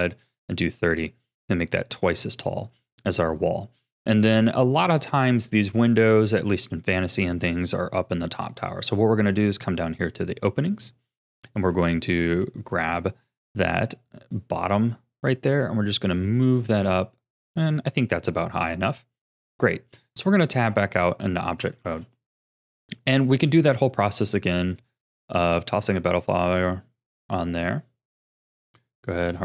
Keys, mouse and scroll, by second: 9.1-10.1 scroll down 3, 14.2-17.2 drag, 20.1 Tab, 21.0 click, 21.8 ctrl+s, 22.3-23.6 shift+middle drag, 23.6 click, 24.5-28.7 drag, 29.3 click.